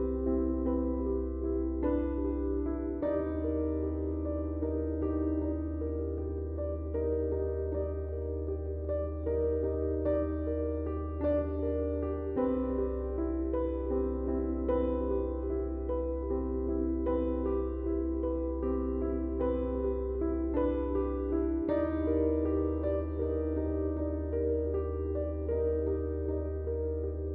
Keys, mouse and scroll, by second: 0.1 right click, 3.0 click, 4.7 typing, 5.2-8.5 drag, 13.9 click, 14.3 shift+Num_Lock, 14.3 typing, 14.6 shift+click, 20.6 click, 24.4 click.